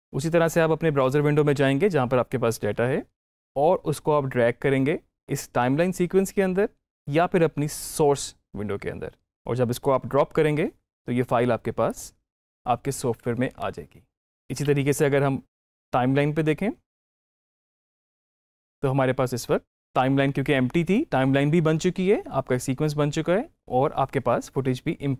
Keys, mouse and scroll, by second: 1.2-3.1 drag, 3.2-11.7 drag, 14.4 ctrl+z, 16.3 alt+Tab, 17.1-18.6 drag, 19.7 click.